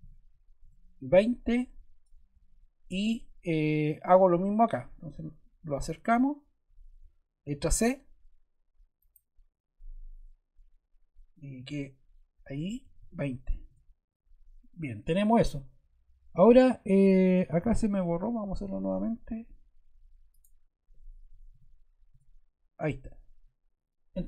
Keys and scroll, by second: 0.5 Return, 7.5 c, 12.5-13.4 typing, 13.6 Return, 18.6 c, 21.0-21.9 typing, 22.1 Return.